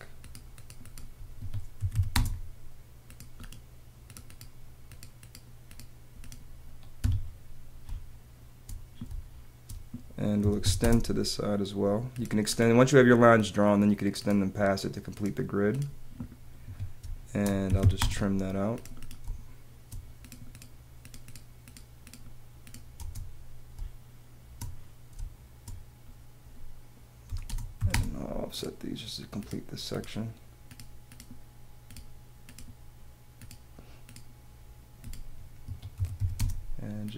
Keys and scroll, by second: 1.3 Escape, 3.0 space, 7.0 Escape, 8.0 space, 10.1-11.7 typing, 16.6 Escape, 19.0 space, 19.2 space, 22.9 space, 25.1 space, 27.2 o, 35.6 Escape.